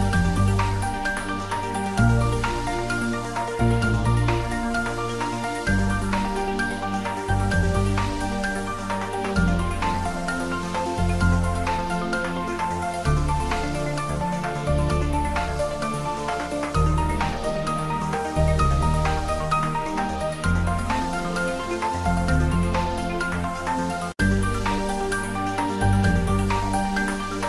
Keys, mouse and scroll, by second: 4.2 scroll down 1, 5.3 middle click, 5.9 scroll up 1, 8.0-8.7 scroll up 1, 8.7 a, 8.9 g, 9.8 click, 10.6 h, 11.0 scroll down 1, 11.2 middle click, 11.5 scroll up 1, 11.7 middle click, 12.1 scroll down 1, 12.2 middle click, 12.8 shift+a, 15.7 click, 17.7-18.4 scroll up 1, 18.4 g, 18.5 z, 19.0 click, 19.4 s, 19.5 z, 20.7 click, 21.6-22.1 scroll down 1, 22.1 click, 22.5-23.2 scroll up 1, 23.2 s, 23.4 y, 25.5 click, 26.1 Tab, 26.7 ctrl+t.